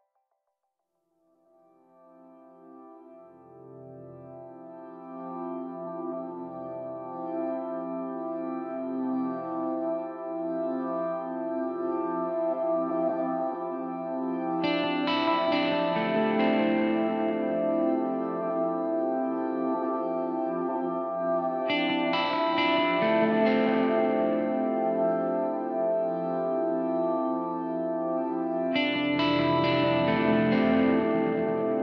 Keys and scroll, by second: 2.2 super+-, 3.7 super+=, 3.8 super+BackSpace, 5.6 BackSpace, 14.0 super+c, 16.1 super+v, 18.0 space, 18.5 space, 18.6 space, 19.3 super+=, 19.9 super+-, 20.3 super+=, 21.1 space, 21.6 space, 21.7 space, 27.5 super+-, 29.1 super+;, 30.2 space, 30.7 space, 30.8 space, 31.7 super+=.